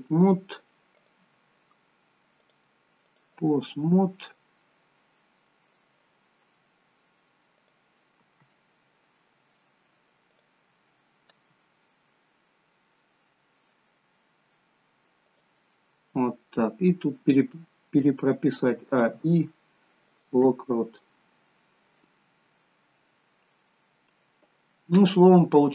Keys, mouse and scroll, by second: 0.0 middle click, 1.0 click, 2.5 click, 6.6 middle click, 7.7 click, 10.4 click, 11.8 g, 16.0 middle click, 18.9 a, 19.2 i, 21.2-21.9 scroll down 2, 22.1-22.7 scroll down 1, 25.0 middle click.